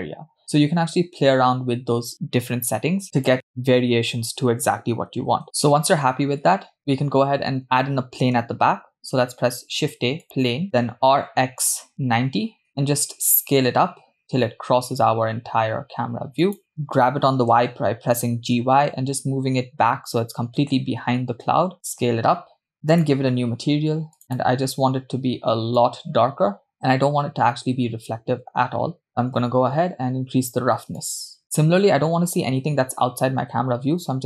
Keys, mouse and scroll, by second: 3.2-5.4 drag, 8.9 shift+a, 10.9 r, 13.7 s, 17.2 g, 22.1 s, 23.3 click, 24.2 click, 25.0 click, 27.7-28.8 scroll down 2, 28.8-30.8 scroll down 1, 31.0 click.